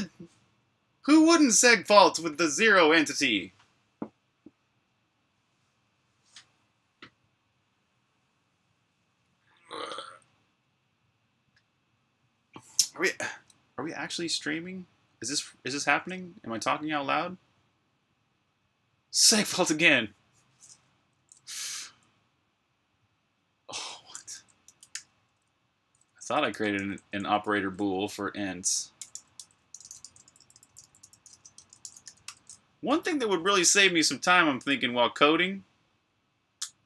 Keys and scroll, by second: 20.8 Escape, 21.0-21.7 typing, 23.7-25.2 typing, 26.6 Tab, 26.9 Tab, 27.2 Return, 28.6-32.4 typing, 33.5-34.3 typing.